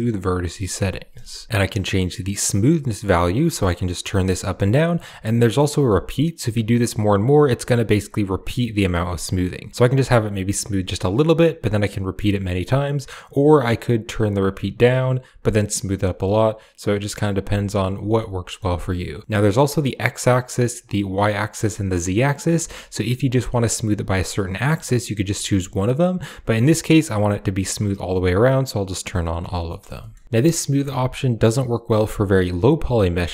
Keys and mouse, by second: 0.0 click, 1.5-4.8 drag, 6.2 click, 7.1 click, 8.2-10.7 drag, 11.5 click, 11.7 click, 11.8 click, 12.0 click, 12.2 click, 12.3 click, 13.7 click, 13.9 click, 14.0 click, 14.2 click, 14.3 click, 14.5 click, 14.6 click, 14.8 click, 15.2-17.7 drag, 18.0 middle click, 18.9 click, 19.8 click, 20.1 click, 20.8 click, 21.3 click, 21.8 click, 22.4 middle click, 24.3 click, 25.1 click, 26.0 click, 26.4 middle click, 28.5 click, 29.1 click, 29.5 middle click, 29.8 shift+middle click, 33.1 shift+a.